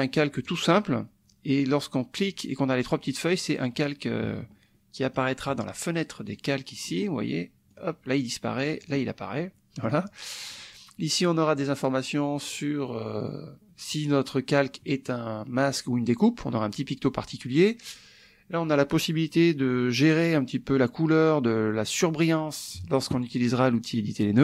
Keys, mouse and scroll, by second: 0.5 click, 2.2 click, 5.0 click, 6.3 click, 7.7 click, 8.8 click, 9.8 click, 10.5 click, 18.0 click.